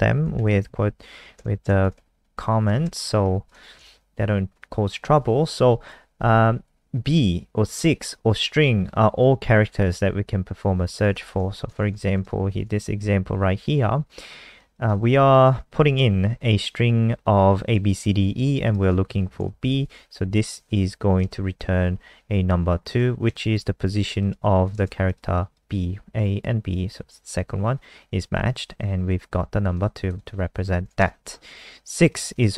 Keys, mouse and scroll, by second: 0.1 /, 0.3 *, 0.5 Down, 0.7 Down, 0.8 Down, 1.0 Down, 1.3 Return, 1.8 *, 1.9 /, 2.5 Home, 2.8 BackSpace, 3.2 ctrl+s, 3.4 click, 4.4 scroll down 2, 5.5 ctrl+s, 7.0 click, 11.6 shift+End, 11.9 ctrl+c, 12.1 click, 12.6 ctrl+v, 14.5 click, 15.5 ctrl+shift+Right, 18.6 click, 19.5 shift+Left, 20.5 Right, 20.6 Right, 20.7 Right, 21.3 ;, 22.9 ctrl+s, 23.3 F5, 24.2 click, 25.1 alt+click, 29.7 click, 30.1 click, 30.7 shift+Home, 31.0 BackSpace, 32.1 click.